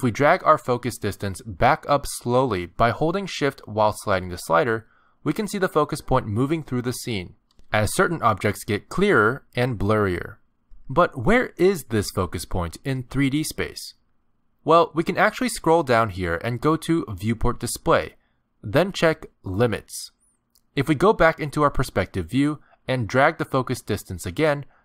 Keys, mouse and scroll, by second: 1.3 click, 17.3 click, 18.0-19.5 scroll down 8, 19.5 click, 21.2 middle click, 22.1-23.0 scroll down 11, 23.1 scroll up 4, 23.4 scroll down 1, 23.8 click.